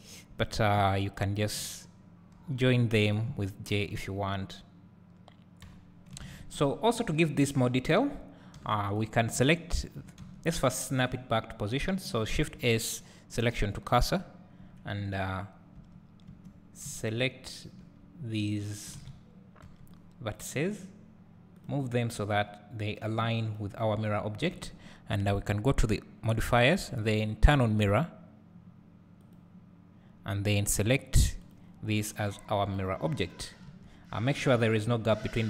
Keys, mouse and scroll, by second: 0.4 click, 1.2 shift+click, 2.3 j, 3.1 click, 3.7 shift+click, 5.6 j, 6.2 alt+a, 6.7-7.2 scroll down 1, 7.4 scroll up 1, 8.6 3, 8.9 click, 9.7 shift+click, 10.2 Tab, 11.0 scroll down 1, 13.4-14.9 shift+drag, 14.6 KP_Decimal, 15.3 click, 15.3 scroll down 1, 16.3 1, 19.0 alt+a, 20.4 b, 21.7-31.7 drag, 24.5 Tab, 33.7 Tab, 34.3 Tab.